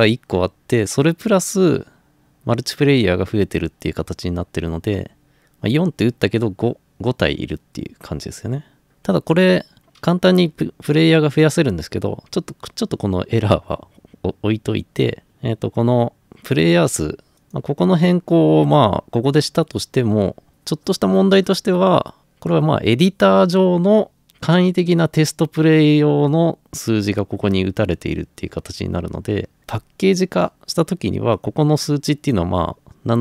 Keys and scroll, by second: 9.8 Escape.